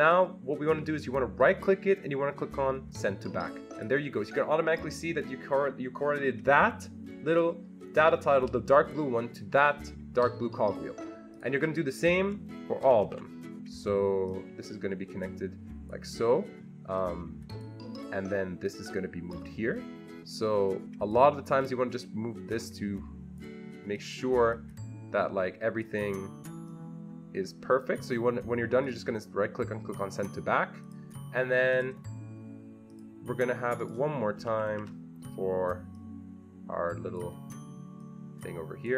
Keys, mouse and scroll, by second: 1.4 right click, 3.7 click, 11.3 click, 12.8 ctrl+c, 13.1 ctrl+v, 14.6-16.2 drag, 17.3 click, 19.0-21.2 drag, 24.5-30.8 drag, 28.8 right click, 30.8 click, 31.7 click, 32.9 click, 33.8 click, 34.5 ctrl+c, 34.7 ctrl+v, 35.9-38.9 drag.